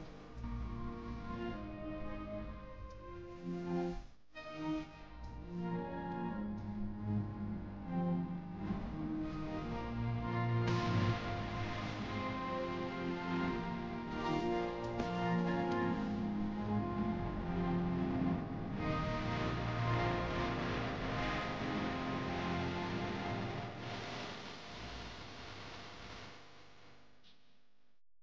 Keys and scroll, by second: 3.6 shift+F2, 4.5 Escape, 10.6 F9.